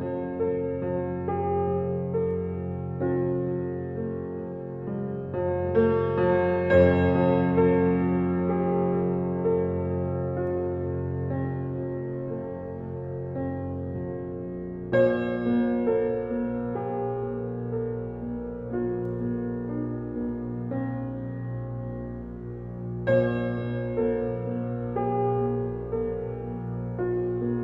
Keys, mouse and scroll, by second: 0.1 shift+middle click, 0.9 ctrl+r, 4.0 ctrl+r, 6.1 alt+middle click, 6.4-7.1 alt+scroll up 4, 7.1 shift+middle click, 7.5 g, 9.2-11.3 middle drag, 11.3 click, 12.4 scroll down 4, 12.6 middle click, 13.1 Tab, 13.3 scroll down 1, 13.6-14.8 middle drag, 15.0 alt+middle click, 15.5-15.9 shift+scroll up 6, 15.9 Tab, 17.0 click, 18.0 click, 19.1 middle click, 19.6 scroll down 2, 19.8 middle click, 20.4 e, 23.5 Tab, 23.7-24.1 scroll down 5, 24.1-25.1 right drag, 25.1 scroll up 2, 25.3 click, 25.4 scroll down 2, 25.6-27.1 middle drag, 27.5 scroll down 1.